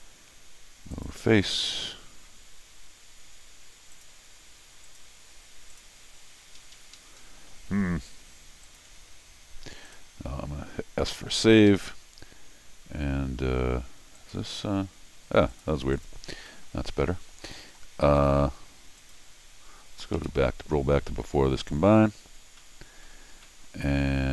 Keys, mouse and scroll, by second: 0.9 click, 3.9 click, 4.8 click, 5.7 click, 6.6 Escape, 6.7 Escape, 6.9 Escape, 7.2 scroll down 2, 8.6 click, 9.9 click, 11.7 Escape, 11.9 Escape, 14.2 click, 15.5 click, 15.9 click, 16.5 scroll down 1, 16.9 scroll up 1, 17.5 scroll down 1, 17.7 middle click, 19.0 click, 20.1 ctrl+alt+r, 21.3 scroll down 2, 22.0-22.5 scroll down 2, 22.6 middle click, 23.3 scroll down 1, 23.4 middle click.